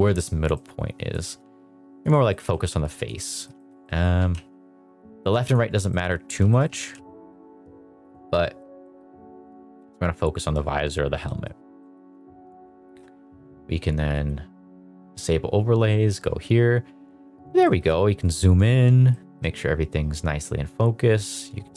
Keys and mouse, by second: 0.5 middle click, 1.2 g, 2.2-2.9 middle drag, 2.4 g, 3.2 middle drag, 3.5 shift+middle drag, 3.8 middle click, 4.3 g, 4.3 x, 5.4 click, 5.9 middle drag, 6.4 shift+middle drag, 6.6 g, 6.9 x, 8.2-8.6 middle drag, 8.8 middle drag, 9.7 g, 11.2 middle drag, 11.7 middle click, 12.1 KP_0, 12.8 shift+middle drag, 14.1 click, 17.6 shift+middle click, 19.1 shift+middle drag.